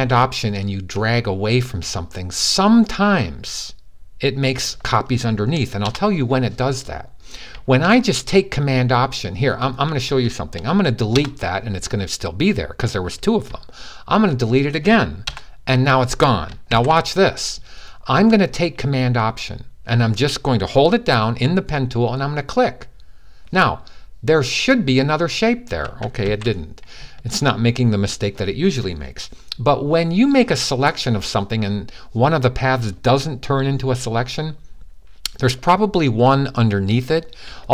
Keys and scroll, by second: 16.5 super+z, 26.0 super+z.